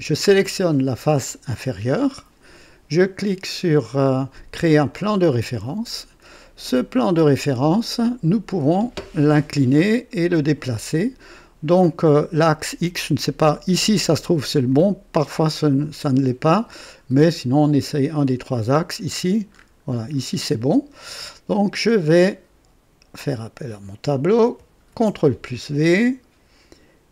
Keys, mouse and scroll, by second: 4.9 click, 6.4-7.8 drag, 9.0-10.3 drag, 12.5-13.8 drag, 14.6-16.3 drag, 18.5 click, 19.0-19.4 scroll down 2, 19.5-20.4 scroll up 4, 23.1 click, 24.9 v.